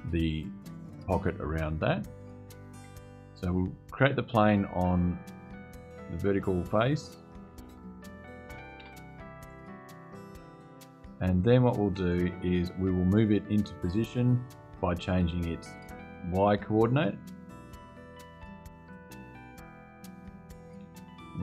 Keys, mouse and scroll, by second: 3.5 click, 5.8 click, 7.5 click, 8.5 BackSpace, 9.2 click, 10.8 click, 14.1 click, 17.6-18.0 scroll up 1, 18.1-18.5 scroll up 1, 18.7-20.0 scroll up 3.